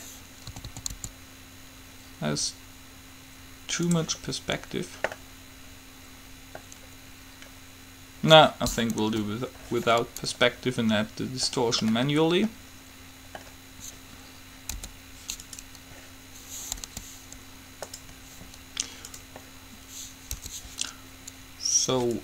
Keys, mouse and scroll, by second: 0.6 a, 1.0 a, 1.2 s, 4.8-10.9 middle drag, 9.2 KP_5, 15.0 u, 17.0 g, 19.3-21.1 drag, 20.5 n.